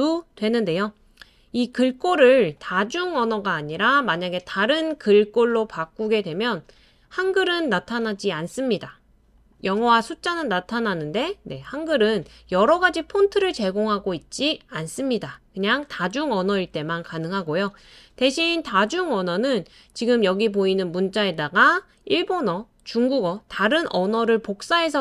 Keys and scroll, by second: 24.6 BackSpace, 24.9 BackSpace.